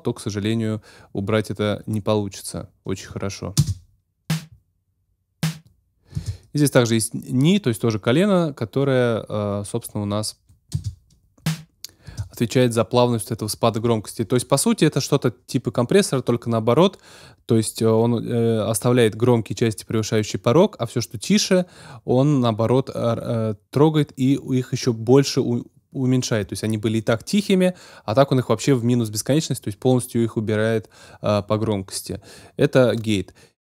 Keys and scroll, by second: 3.5 space, 6.1 space, 10.7 space, 12.1 space.